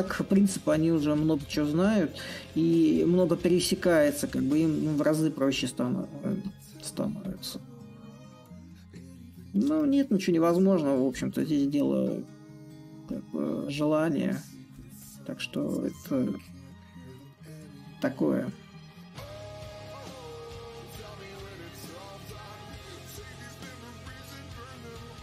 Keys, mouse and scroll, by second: 0.0-2.2 drag, 2.9-6.2 ctrl+drag, 6.2 ctrl+z, 7.0-9.6 ctrl+drag, 9.6 ctrl+z, 10.8 click, 12.8-21.2 ctrl+drag, 22.2-25.2 ctrl+drag.